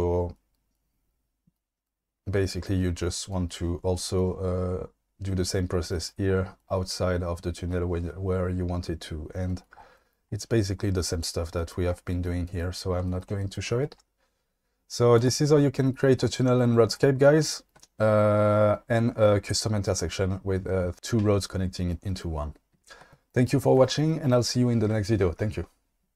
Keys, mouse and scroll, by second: 12.3-13.0 shift+middle drag, 13.3-13.8 shift+middle drag, 15.1 click.